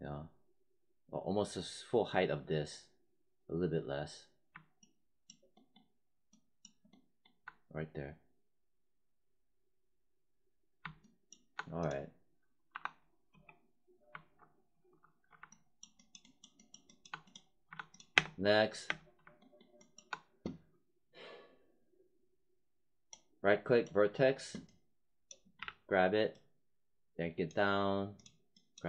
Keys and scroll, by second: 12.6 5, 13.2 space, 18.1 space, 25.5 w.